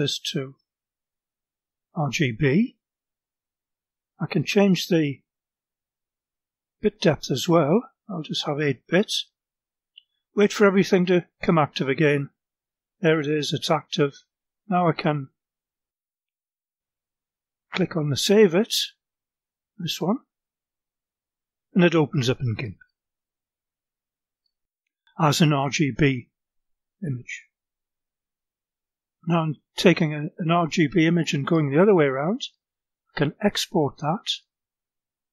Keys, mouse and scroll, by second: 1.4 click, 7.1 click, 8.4 click, 20.1 click, 25.8-27.5 drag, 32.3 click, 33.9 click.